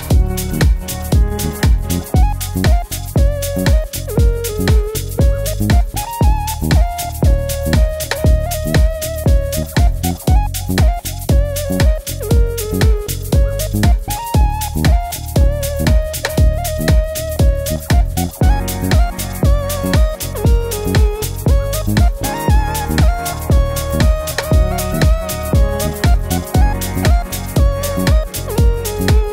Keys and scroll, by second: 20.6 typing, 22.1 typing, 24.2 typing, 25.9 typing.